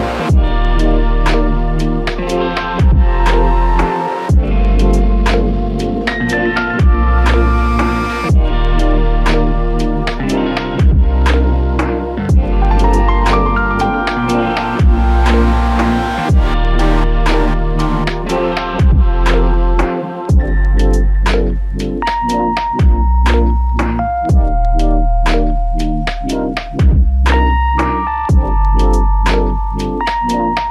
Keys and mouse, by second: 3.1 alt+click, 4.7 alt+click, 5.8 alt+click, 15.2 double click, 22.8 double click, 27.4 double click.